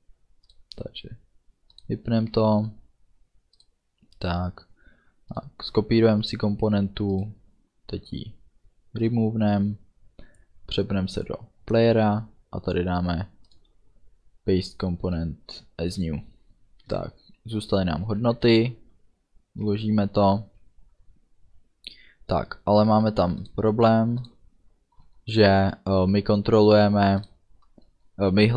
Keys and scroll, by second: 18.1 ctrl+s.